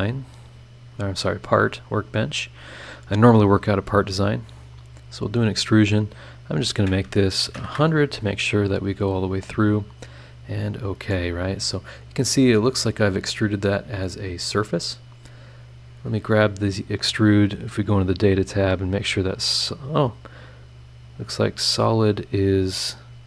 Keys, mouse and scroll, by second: 1.6 click, 3.9 click, 7.4 KP_1, 7.5 KP_0, 10.1 click, 10.8 scroll down 2, 11.1-12.5 middle drag, 11.2-12.5 drag, 12.7-13.2 scroll up 4, 13.3 middle click, 13.3 click, 13.7 right click, 13.8 scroll up 1, 14.2 scroll down 2, 14.7 scroll up 2, 15.7 click, 19.0 click, 19.9 click, 20.8 click, 21.3 click, 22.3 click, 22.9 scroll down 1.